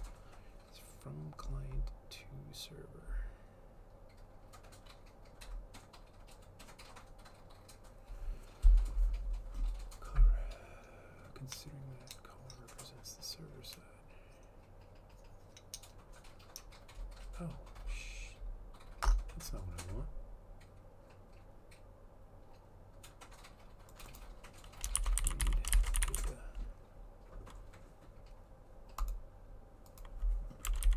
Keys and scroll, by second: 24.9-26.8 typing, 30.6-30.9 typing.